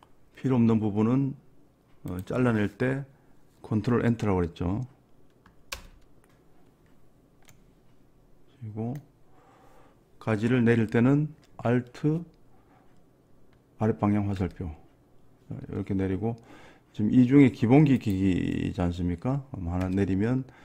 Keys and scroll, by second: 5.8 ctrl+Return, 14.5 alt+Down, 19.9 alt+Down.